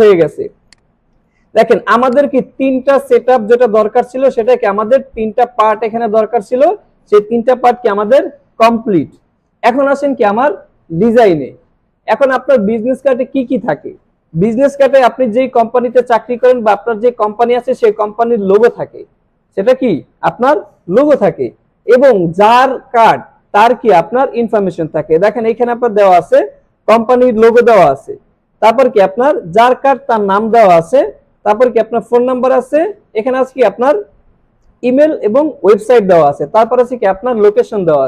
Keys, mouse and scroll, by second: 0.5 space, 0.7 click, 1.0 space, 1.6 alt+scroll up 1, 2.0 space, 2.1 click, 6.0 click.